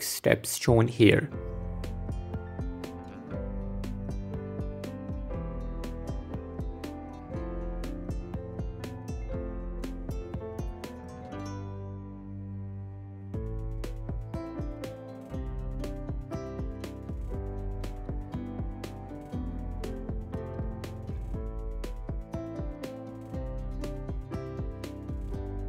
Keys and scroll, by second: 2.1 Tab, 5.8 Tab, 7.5 alt+e, 7.8 s, 8.1 Escape, 8.4 s, 8.9 Tab, 9.4 ctrl+2, 12.8 Tab, 12.9 a, 13.0 s, 13.1 Escape, 13.4 s, 13.9 Tab, 19.4 Tab, 19.8 s, 20.3 s, 20.4 Tab, 21.4 Tab, 21.6 s, 22.1 s, 22.4 s, 22.8 Tab, 23.4 Tab, 23.7 s, 24.2 Tab, 24.7 f, 24.8 f.